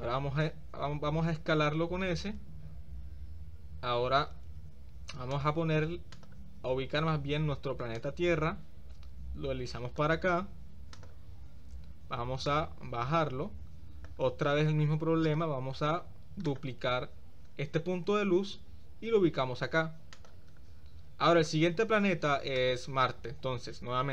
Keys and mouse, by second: 1.8 s, 6.2-6.5 drag, 8.1-10.1 drag, 10.9 click, 12.5-14.2 drag, 16.5 click, 18.2 shift+d.